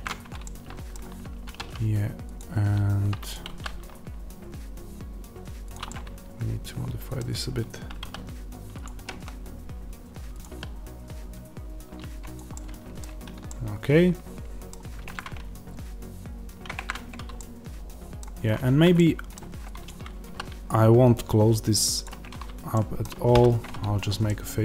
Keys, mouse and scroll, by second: 1.3 ctrl+r, 3.2 click, 3.4 s, 5.6 click, 5.8-7.9 middle drag, 7.9 s, 8.7 click, 8.9 g, 10.3 click, 10.4 s, 12.4-15.0 middle drag, 12.9-13.4 scroll down 1, 16.8-19.8 middle drag, 18.6 Tab, 19.3 1, 19.8 click, 20.2 s, 21.9 click, 22.2-22.6 scroll up 1, 22.6-24.6 middle drag, 23.2 f.